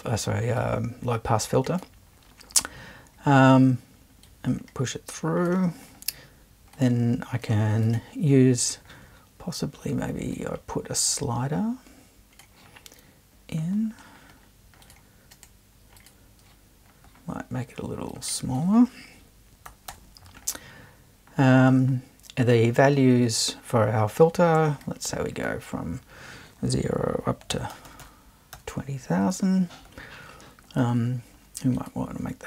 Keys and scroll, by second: 19.4-20.4 typing, 27.3-28.2 typing.